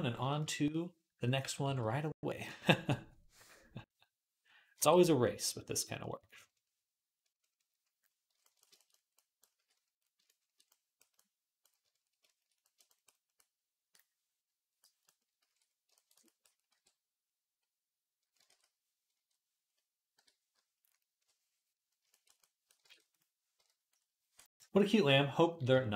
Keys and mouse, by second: 0.0-10.8 shift+drag, 0.0 right click, 0.2 shift+middle click, 0.4-1.5 shift+right drag, 1.4 alt+q, 9.4 d, 11.0 click, 11.3-12.4 shift+drag, 13.3-14.6 drag, 15.3 alt+q, 16.5 r, 18.3 ctrl+r, 20.4 |, 20.4 ], 20.9 ], 21.0 ], 22.7 ctrl+Tab, 23.4 KP_1, 25.6-25.9 shift+drag.